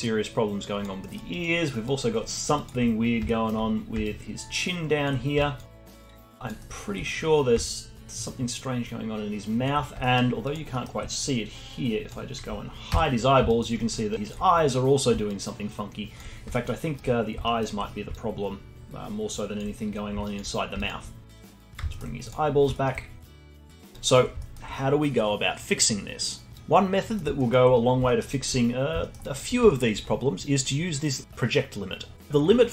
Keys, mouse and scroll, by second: 0.9 alt+middle drag, 1.2 alt+drag, 1.5 alt+middle drag, 1.8-2.2 alt+drag, 2.2 alt+middle drag, 2.5 alt+click, 3.0-4.0 scroll up 3, 3.2-3.6 alt+middle drag, 4.0-5.1 alt+drag, 5.1 scroll up 1, 5.3-5.8 alt+drag, 5.8 scroll down 1, 6.0 alt+middle drag, 6.3 alt+drag, 6.5-6.9 alt+middle drag, 6.9-7.6 scroll up 5, 7.6-9.7 alt+drag, 9.7 scroll down 2, 9.9-10.4 alt+middle drag, 10.4 alt+drag, 10.7-12.0 alt+middle drag, 12.0 click, 12.9 h, 13.2 scroll up 2, 13.4 alt+drag, 13.7-14.1 alt+middle drag, 14.1-16.5 alt+drag, 16.5-17.1 alt+middle drag, 17.1-18.1 scroll up 2, 17.5-17.9 alt+middle drag, 18.1-19.8 alt+drag, 19.8-20.3 scroll down 4, 20.3 alt+click, 20.5 scroll down 4, 20.8-21.7 alt+drag, 21.7 ctrl+z, 21.9-22.3 alt+middle drag, 22.3 click, 22.5-23.4 scroll down 4, 22.7-23.1 alt+middle drag, 23.4 alt+middle drag, 23.7 click, 24.0-24.5 alt+drag, 24.5-26.6 alt+middle drag, 27.1 middle click, 27.4-27.8 alt+middle drag, 27.8 scroll up 2, 28.1 alt+middle drag, 28.3 alt+click, 28.7-29.0 scroll up 1, 29.0 alt+middle click, 29.2 alt+click, 29.7-32.3 alt+middle drag.